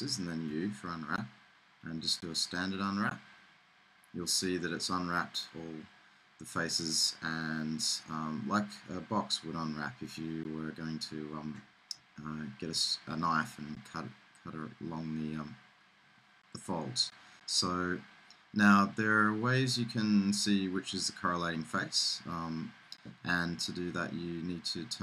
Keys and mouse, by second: 0.8 u, 22.8-24.3 middle drag.